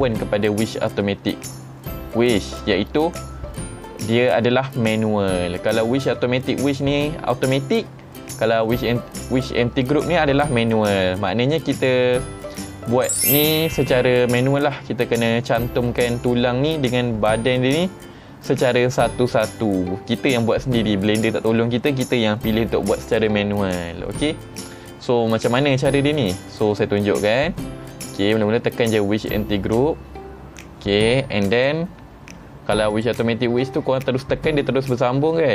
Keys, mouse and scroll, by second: 29.2 click, 30.3-31.6 middle drag, 30.3-31.6 scroll down 1, 31.6 click, 31.6 scroll down 1, 32.9 click, 34.8 ctrl+Tab.